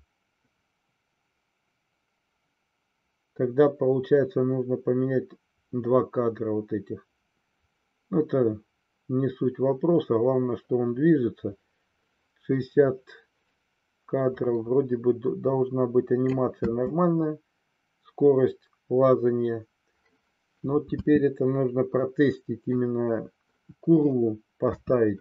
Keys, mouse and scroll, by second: 16.5 space, 21.0 space, 21.9 middle click, 24.6 KP_3.